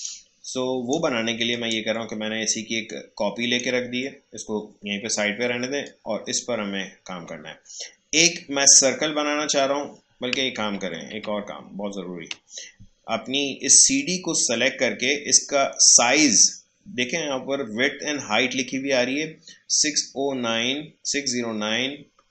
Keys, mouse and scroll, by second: 0.1 space, 0.4 click, 0.6 space, 1.5-5.8 alt+drag, 5.8-8.8 drag, 10.3 click, 10.6 ctrl+z, 13.9-16.9 drag.